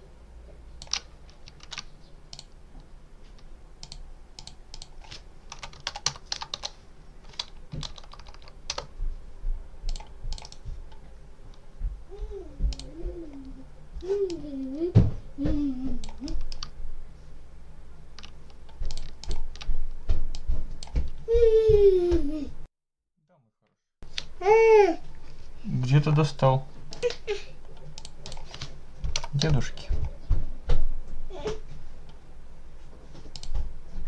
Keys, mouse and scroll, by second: 1.5 ctrl+s, 2.2 click, 3.7 click, 4.2 click, 5.2-7.3 typing, 8.6 Return, 9.8 click, 10.2 click, 10.4 right click, 12.6 click, 14.2-16.1 drag, 16.1-16.5 scroll up 1, 16.5 ctrl+middle click, 16.6 ctrl+scroll down 1, 16.8 ctrl+middle click, 18.8-19.4 ctrl+drag, 20.2-20.9 drag, 26.8 click, 27.8 click, 28.7-29.6 typing, 33.2 click.